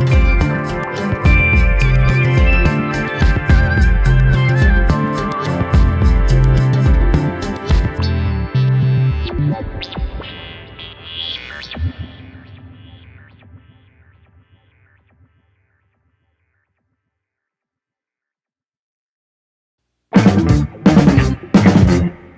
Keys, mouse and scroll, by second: 0.5 click, 3.2 click, 3.9 scroll down 4, 4.2-4.6 middle drag, 4.6-5.5 scroll up 2, 5.5 scroll down 1, 5.7 shift+middle click, 6.7 click, 10.1 KP_7, 10.3 scroll down 1, 12.7-13.9 drag, 18.1 click.